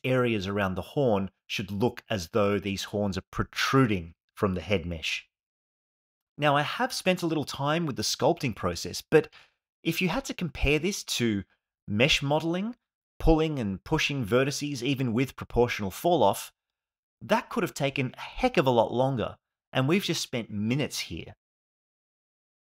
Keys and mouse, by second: 0.2 click, 0.7 click, 1.2 click, 2.0 ctrl+z, 2.1 click, 3.2 click, 3.8 click, 4.6 alt+shift+middle click, 4.8 ctrl+alt+middle click, 5.1 alt+middle click, 5.7 alt+middle click, 6.0 alt+middle click, 7.3 alt+middle click, 7.5 click, 9.6 click, 12.8 ctrl+z, 13.6 click, 14.0 click, 15.9 click, 16.0 click, 16.4 click, 18.4 click, 18.9 ctrl+z, 19.1 shift+f, 19.3 shift+click, 19.8 alt+middle click, 20.4 ctrl+alt+middle click, 21.3-22.7 alt+middle drag.